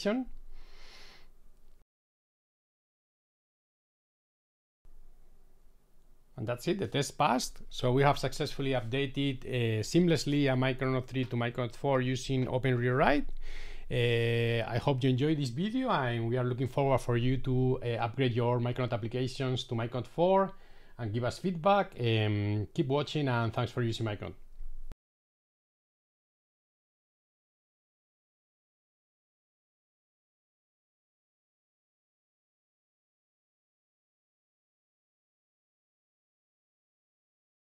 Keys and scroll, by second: 9.1 shift+super+i.